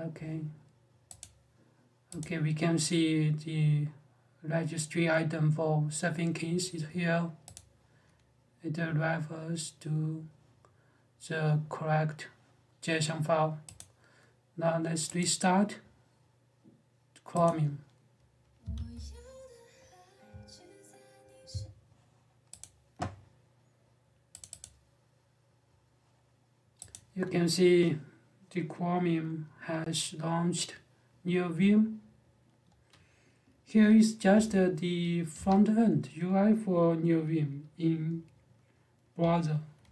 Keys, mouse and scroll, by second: 13.5 click, 15.0 right click, 17.2 click, 22.4 click, 24.1 click, 24.4 double click, 26.7 click, 34.1 j, 35.1 Escape.